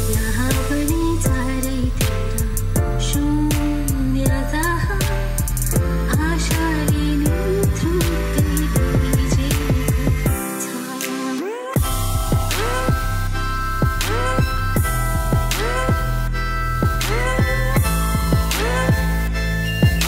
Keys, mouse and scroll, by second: 7.5-8.6 drag, 8.7-9.8 drag, 10.7-12.0 drag, 12.8-14.1 drag, 16.4-18.6 drag, 19.4 click.